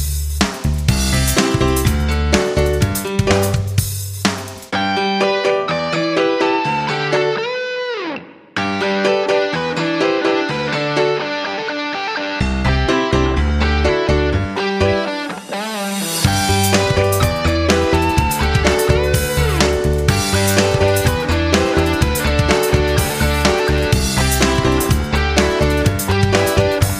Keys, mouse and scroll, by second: 0.7 F9, 1.8 click, 11.4 click, 17.0 F9, 18.2 click.